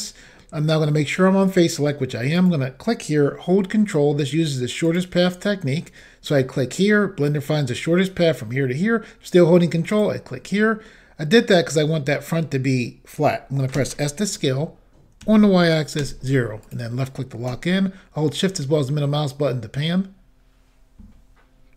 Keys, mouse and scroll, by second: 2.4 click, 4.8 ctrl+click, 9.9 ctrl+click, 10.6 middle click, 13.3-13.7 scroll up 1, 16.0 y, 16.0 o, 16.7 click, 17.8 shift+middle click, 18.9 middle click.